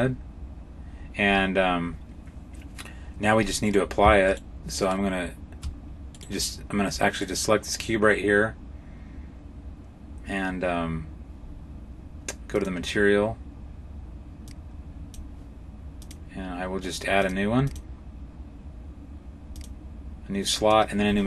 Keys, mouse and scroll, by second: 0.8 scroll down 1, 1.0-2.6 scroll down 4, 3.6 right click, 4.1 shift+right click, 5.5 right click, 6.0 right click, 7.0 right click, 12.4 click, 14.3 click, 15.8 click, 17.5 click, 19.4 click, 20.4 click.